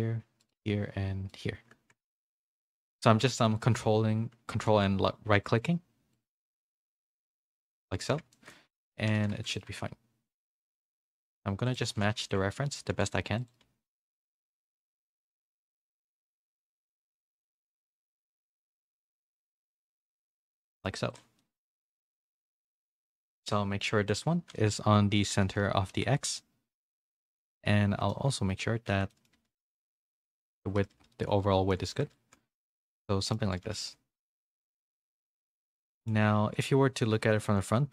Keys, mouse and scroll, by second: 2.2 shift+middle click, 3.3 ctrl+z, 8.3 shift+middle click, 9.0-15.9 typing, 16.9 g, 17.4 a, 17.8 c, 18.2 g, 19.3 z, 19.8 Tab, 20.0 a, 20.1 a, 20.2 middle click, 21.4 middle click, 21.7 g, 24.1-26.4 drag, 28.1 middle click, 29.1 Tab, 29.1 middle click, 29.3 a, 29.6 s, 30.5 Tab, 30.7 a, 31.1 middle click, 31.1 a, 32.1 shift+middle click, 32.1 a, 32.6 middle click, 33.5 a, 33.8 middle click, 33.8 a, 35.5 middle click, 37.2 KP_1.